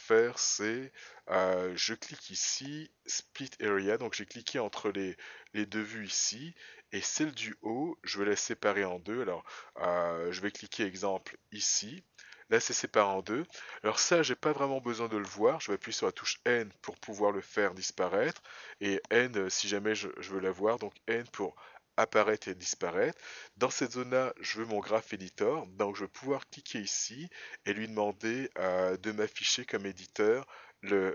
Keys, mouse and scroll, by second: 1.4 right click, 16.5 n, 18.6 n, 20.1 n, 20.4 n, 26.6 click.